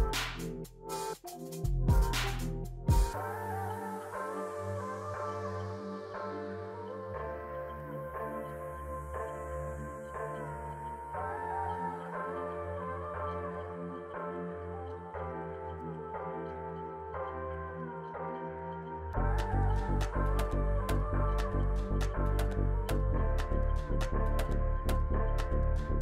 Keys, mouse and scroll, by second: 3.4 5, 5.3 5, 5.7 Return, 10.0 double click, 11.4 double click, 12.3 double click, 15.2 double click, 18.0 2, 20.3 2, 20.5 Return, 23.3 double click, 24.4 double click, 25.3 double click.